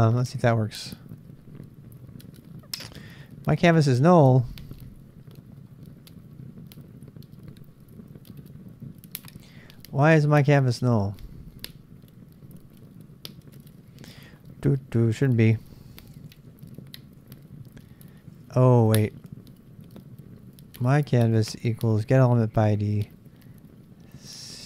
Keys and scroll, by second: 0.3 Return, 12.4 Up, 14.1 ctrl+c, 15.1 Return, 15.7-17.7 typing, 18.6 Up, 18.9 Up, 20.7 Up.